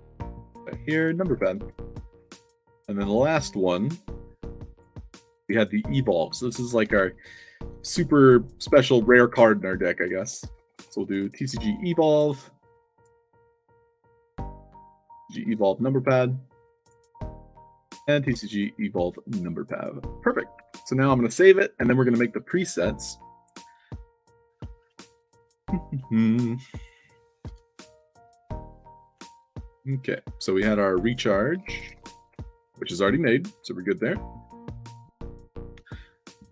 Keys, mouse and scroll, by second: 0.2 click, 0.4 ctrl+v, 0.9 space, 1.2 p, 2.8 click, 3.7 shift+p, 4.6 click, 4.9 f, 5.7 click, 6.7 shift+c, 9.7-11.2 typing, 11.4 ctrl+a, 11.6 ctrl+c, 12.0 click, 12.4 middle click, 12.8 click, 13.6 click, 13.9 click, 14.2 ctrl+v, 14.7 shift+space, 15.0 shift+p, 15.4 ctrl+a, 15.7 ctrl+c, 16.7 click, 17.4 click, 17.7 ctrl+v, 19.8 click, 20.1 middle click, 20.6 s, 25.3 click, 26.7 click, 28.3 middle drag, 28.7-29.2 right drag, 29.2 middle drag, 29.5-30.0 drag, 31.2-32.3 typing, 33.4 click, 34.0 drag, 34.7 click, 35.5 click, 36.2 u.